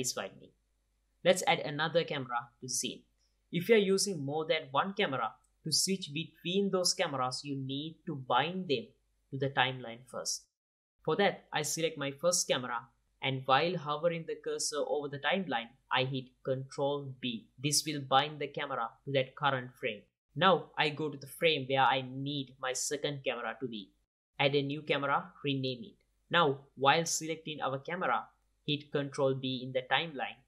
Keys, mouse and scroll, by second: 0.8 click, 1.7 KP_0, 10.0-11.9 drag, 15.0-17.1 drag, 16.3 ctrl+b, 18.4-20.4 drag, 24.8 shift+a, 25.4 F2.